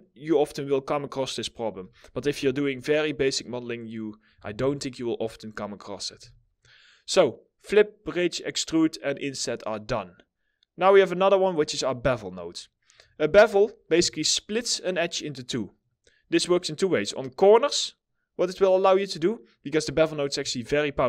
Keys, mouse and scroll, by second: 1.2 Delete, 2.7 middle click, 3.8 scroll up 1, 4.0 4, 4.9 alt+middle click, 5.7 alt+middle click, 5.7 w, 11.4 middle click, 12.1-12.5 scroll up 1, 12.7 alt+middle click, 13.4 2, 14.6 double click.